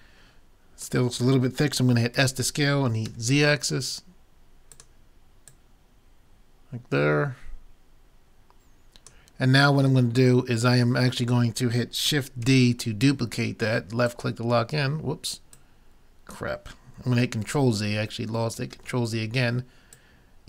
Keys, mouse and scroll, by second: 0.1 click, 2.2 s, 5.5-7.3 drag, 9.9 middle click, 10.3 middle click, 12.5 shift+d, 14.1-17.3 drag, 17.4 ctrl+z, 18.7 ctrl+z, 19.9-20.4 drag.